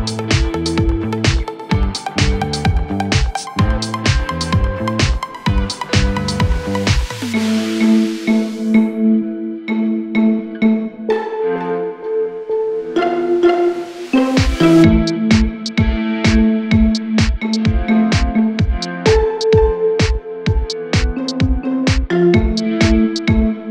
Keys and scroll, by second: 0.6 s, 0.9 space.